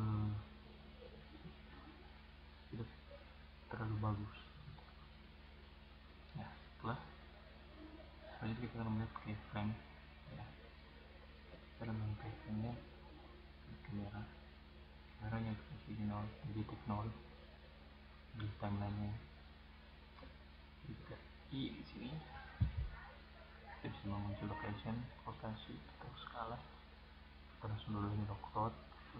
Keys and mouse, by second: 0.3-1.9 drag, 1.9-3.6 right drag, 4.2 click, 6.2 middle click, 8.6 click, 9.2 click, 9.4 click, 10.0 click, 13.1 click, 23.3-24.3 middle drag, 27.0-29.1 middle drag.